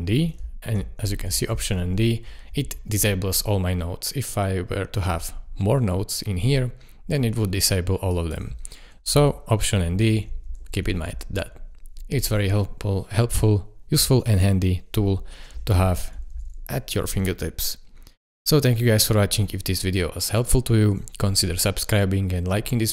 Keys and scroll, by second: 0.7 alt+d, 1.5 alt+d, 9.1 alt+d, 10.0 alt+d, 10.6 alt+d, 11.2 alt+d, 15.7 alt+d, 16.3 alt+d.